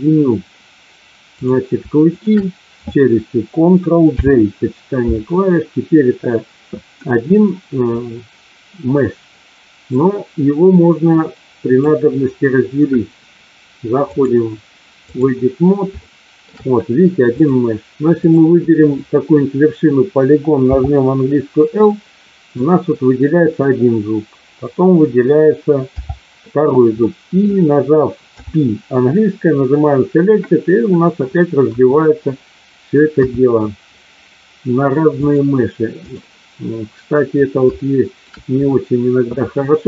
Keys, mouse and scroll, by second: 1.2 click, 4.1 ctrl+j, 8.0-11.8 drag, 14.1-15.2 drag, 16.0 shift+middle click, 20.6 l, 21.8 middle click, 25.8 l, 27.0 middle click, 28.2 p, 31.7 KP_1, 33.1 KP_3, 35.3-36.1 drag, 37.7-38.2 shift+middle drag.